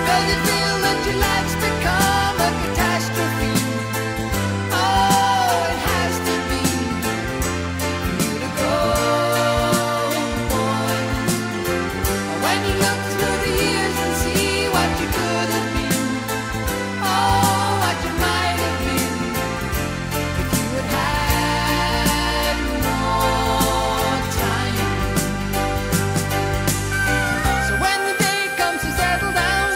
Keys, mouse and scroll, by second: 1.3 middle click, 1.7 right click, 2.3 middle click, 2.8-6.3 right drag, 6.3-11.1 middle drag, 11.1 Tab, 11.9 click, 14.6 click, 16.7-18.3 middle drag, 18.3-19.7 right drag, 19.7 middle click, 20.0-21.0 drag, 21.0-22.1 middle drag, 22.1-23.5 right drag, 23.5 middle click, 24.2-27.5 right drag, 24.4 Tab, 25.6 g, 27.5 middle click, 27.9-29.7 right drag.